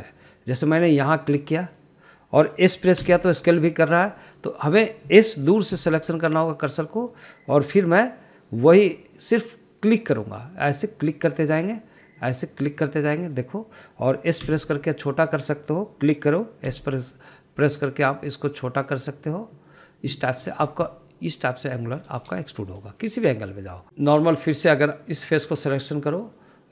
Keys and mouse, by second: 3.0 click, 4.4 s, 5.8 right click, 7.2 s, 8.4 click, 11.3 drag, 12.6 click, 13.6 click, 14.2 click, 14.6 click, 15.9 s, 16.7 click, 17.4 click, 18.1 s, 21.0 click, 22.3 middle click, 23.8 middle click, 24.1 ctrl+z, 25.2 click, 25.7 middle click, 26.6 click.